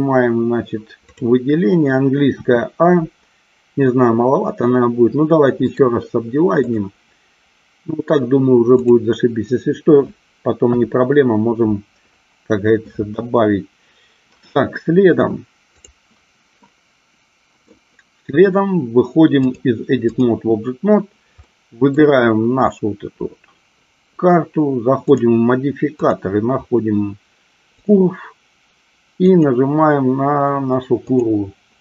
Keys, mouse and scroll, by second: 1.2 click, 2.4 a, 5.9-6.9 right drag, 8.9 click, 10.7 KP_1, 16.8 middle click, 19.6 click, 21.6 middle click, 25.2 click, 26.2-27.9 drag, 29.4 click.